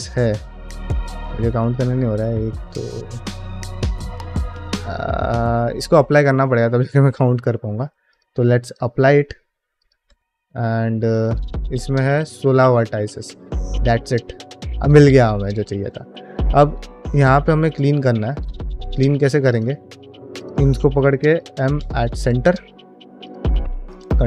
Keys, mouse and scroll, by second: 0.0-1.3 middle drag, 2.2-2.9 middle drag, 3.3 Tab, 4.4-6.1 middle drag, 8.0-8.8 drag, 9.6 click, 9.9 Tab, 10.3 middle click, 11.0 alt+click, 13.4 middle click, 15.3 shift+middle click, 15.6-16.0 scroll up 2, 16.0 shift+middle click, 16.4 shift+middle click, 16.8-17.2 scroll up 1, 17.3 shift+middle click, 17.9 1, 18.3-18.6 scroll down 1, 18.6 shift+middle click, 19.4 click, 20.2 shift+click, 22.9 2, 23.1 click, 23.3 ctrl+x, 23.7 click, 24.0 ctrl+x.